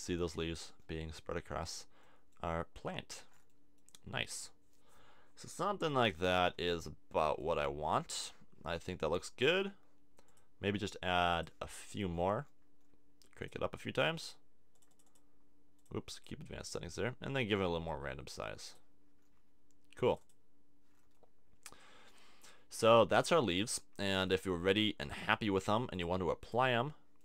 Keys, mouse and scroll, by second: 5.7-9.1 middle drag, 11.5 click.